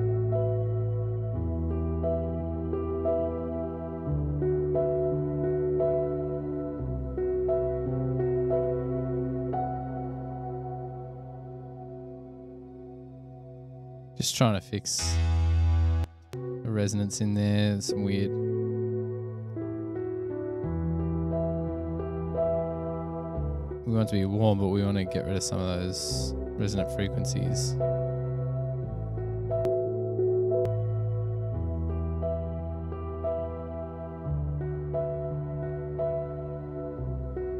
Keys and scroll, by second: 16.3 space, 16.5 space.